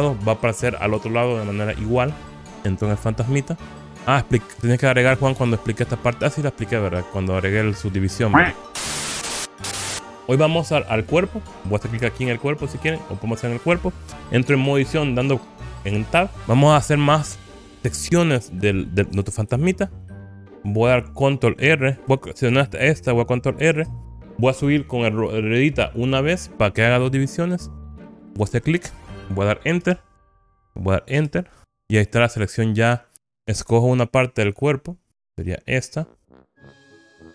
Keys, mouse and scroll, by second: 2.3 click, 2.4 Tab, 3.5-4.7 middle drag, 12.8 click, 16.0 Tab, 16.4 click, 16.4-16.8 scroll down 1, 19.8-21.2 shift+middle drag, 21.7 click, 23.7 ctrl+r, 29.9 Return, 31.2 Return, 32.5 click, 33.3 KP_3, 35.4 click, 36.7 KP_1.